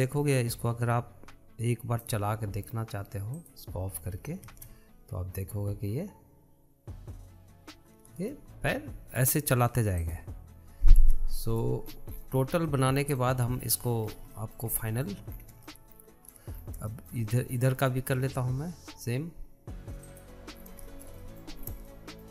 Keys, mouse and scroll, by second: 0.1 scroll down 3, 0.3-1.8 shift+middle drag, 1.8-4.8 drag, 5.8 space, 9.6 space, 11.3-12.4 drag, 12.4-13.2 middle drag, 13.2-14.0 scroll up 10, 14.0 shift+middle click, 14.8-15.6 scroll down 9, 15.6-16.6 shift+middle drag, 16.6-17.0 scroll up 1, 17.0-17.9 shift+middle drag, 17.9-18.2 scroll up 2, 18.2-21.4 shift+middle drag, 21.4 click, 21.9 scroll down 2, 22.1-22.3 shift+middle drag.